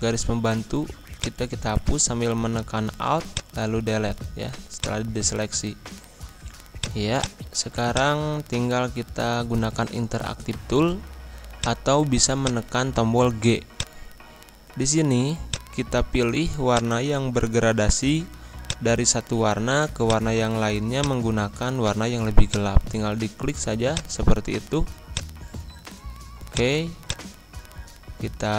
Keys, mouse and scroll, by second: 2.6 Delete, 3.2 click, 4.2 z, 4.7-6.7 drag, 11.5-28.5 drag.